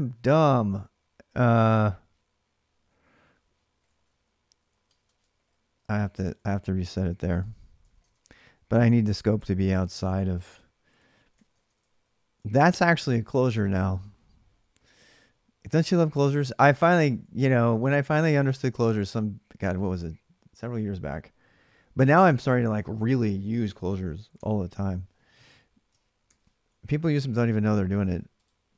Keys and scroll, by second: 1.8-12.3 typing, 9.9 ctrl+[, 13.4 typing, 16.2-17.4 typing, 24.1 alt+Tab, 26.0 ctrl+r, 26.8-28.7 typing.